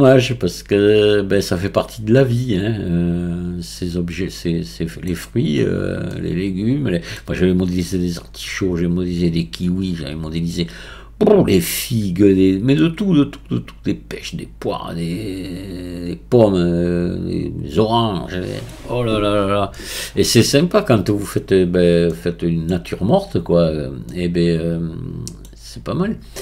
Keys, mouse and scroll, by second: 5.6-6.2 scroll up 1, 6.2 scroll up 1, 6.2-7.5 middle drag, 7.5-9.4 scroll down 1, 9.4-10.5 scroll down 1, 10.5-11.4 scroll down 1, 11.4-12.9 scroll up 1, 12.9-15.8 middle drag, 19.2-19.8 scroll down 2, 19.8-26.4 middle drag.